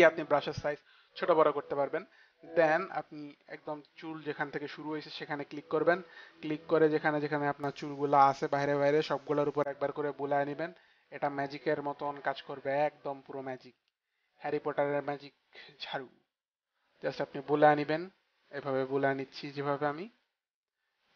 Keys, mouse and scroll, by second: 4.7 click.